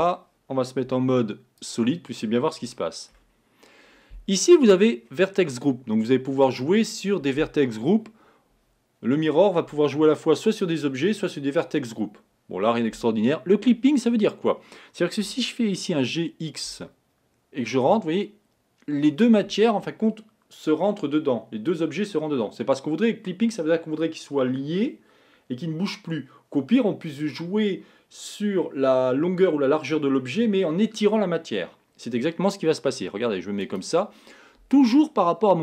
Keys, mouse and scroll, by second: 0.1-0.4 scroll, 0.9 z, 2.8 middle click, 3.4 scroll up 1.